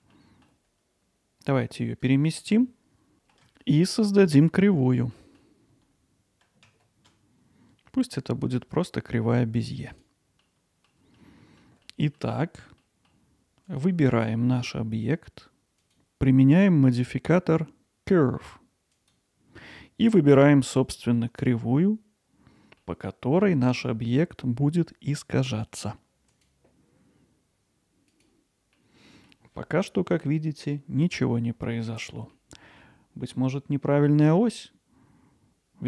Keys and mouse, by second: 0.0 g, 2.6 middle click, 3.1 alt+middle drag, 3.6-4.3 ctrl+alt+middle drag, 4.6 alt+click, 4.6 alt+middle click, 5.2 middle drag, 10.4-10.9 middle drag, 11.2-11.6 alt+middle drag, 11.8-12.2 middle drag, 12.8 middle drag, 13.7 click, 15.9-19.1 drag, 20.7-21.2 middle drag, 22.8-23.4 middle drag, 28.8-29.3 middle drag, 32.3-32.8 middle drag.